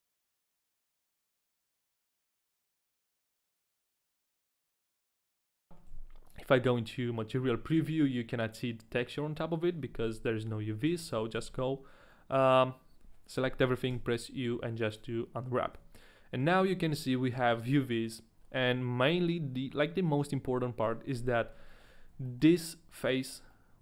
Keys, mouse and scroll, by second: 0.0-2.3 typing, 0.0 middle click, 0.0 shift+right click, 0.1 middle click, 0.2 middle click, 0.2 right click, 0.3 ctrl+e, 0.3 ctrl+right click, 0.3 middle click, 0.4-0.7 scroll down 2, 0.4 middle click, 0.5 right click, 0.7 ctrl+e, 0.7 shift+middle click, 0.7 ctrl+right click, 0.9 right click, 0.9 shift+middle click, 1.0 ctrl+e, 1.0 shift+middle click, 1.0 ctrl+right click, 1.0 scroll down 1, 1.2 ctrl+e, 1.2 ctrl+right click, 1.2 shift+middle click, 1.4 shift+middle click, 1.4 right click, 1.5 ctrl+e, 1.5 ctrl+right click, 1.6 ctrl+e, 1.6 ctrl+right click, 1.6 shift+middle click, 1.8 right click, 1.8 middle click, 1.8 right click, 1.8 shift+middle click, 1.8 scroll up 2, 2.0 ctrl+e, 2.0 shift+middle click, 2.0 ctrl+right click, 2.0 right click, 2.3 ctrl+e, 2.3 ctrl+right click, 2.3 middle click, 2.4 middle click, 2.4 right click, 2.5 middle click, 2.5 scroll down 3, 2.5 shift+middle click, 2.7 shift+middle click, 2.7 middle click, 2.7 shift+middle click, 2.7 scroll up 1, 2.9 ctrl+e, 2.9 ctrl+right click, 3.0 right click, 3.1 shift+middle click, 3.2 ctrl+e, 3.2 right click, 3.2 shift+middle click, 3.3 ctrl+right click, 3.3 a, 3.4 right click, 3.4 ctrl+e, 3.4 right click, 3.4 shift+middle click, 3.4 scroll up 1, 3.4 a, 3.6 middle click, 3.9 ctrl+z, 3.9 ctrl+e, 3.9 ctrl+right click, 4.0 right click, 4.1 shift+middle click, 4.3 ctrl+e, 4.3 ctrl+right click, 4.3 shift+middle click, 4.4 right click, 4.5 shift+middle click, 4.5 scroll down 1, 4.8 ctrl+e, 4.8 ctrl+right click, 5.0 ctrl+e, 5.0 ctrl+z, 5.0 ctrl+right click, 5.1 right click, 5.2 shift+middle click, 5.2 scroll up 2, 5.3 right click, 5.3 shift+middle click, 5.4 ctrl+e, 5.4 ctrl+right click, 5.5 middle click, 5.5 scroll down 4, 5.6 shift+middle click, 5.6 a, 5.9 z, 6.8 middle click, 7.2-8.9 scroll down 1, 10.4 Tab, 10.9 a, 11.3 a, 11.5 a, 12.1 middle click, 13.9 u, 15.8 Tab, 16.0 middle click, 16.8 Tab, 16.8 middle click, 16.8 u, 17.0 scroll up 1, 17.8 Tab, 17.8 shift+middle click, 17.8-18.7 scroll up 1, 21.4-22.0 scroll down 2, 21.9 shift+middle click, 22.0 scroll up 1, 22.5 shift+middle click, 22.5 scroll down 2, 22.6-23.5 scroll down 1, 23.5 middle click.